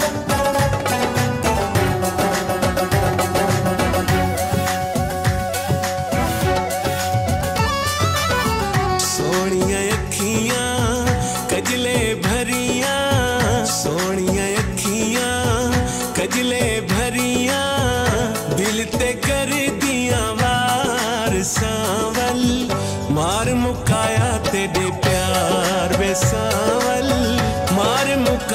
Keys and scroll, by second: 5.8 ctrl+a, 6.6-8.6 typing, 9.9 s, 11.2-13.2 typing, 13.8 ctrl+s, 14.3 Left, 15.8 F4, 26.8 ctrl+z.